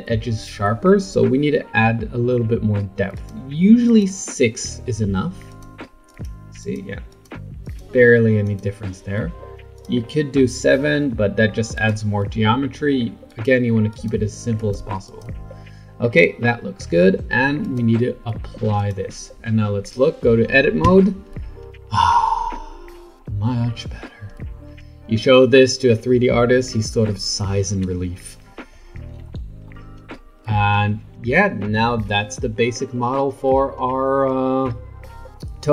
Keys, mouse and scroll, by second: 3.1-5.6 drag, 6.1 click, 6.6 click, 7.1 click, 7.6 click, 8.5 click, 9.7-13.4 drag, 13.9 click, 14.6 click, 15.1 click, 17.6-20.8 drag, 20.8 Tab, 29.1 Tab, 29.7-32.7 middle drag, 34.6-35.7 middle drag.